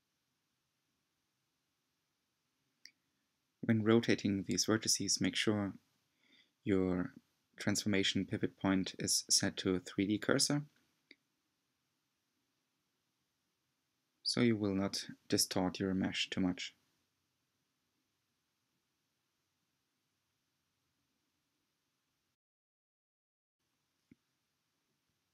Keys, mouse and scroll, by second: 1.4 click, 1.8 g, 4.3 r, 6.7 click, 7.0 r, 9.8 click, 10.0 g, 13.2 click, 13.6 r, 19.2 click, 23.1 click, 23.9 r.